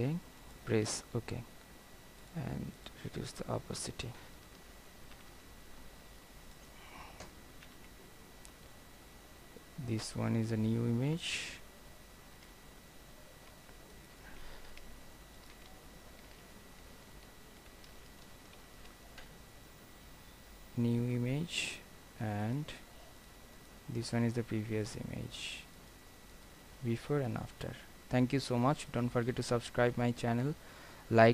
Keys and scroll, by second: 5.2 ctrl+0, 16.4 ctrl+h, 17.6 ctrl+g, 18.7 ctrl+alt+shift+e.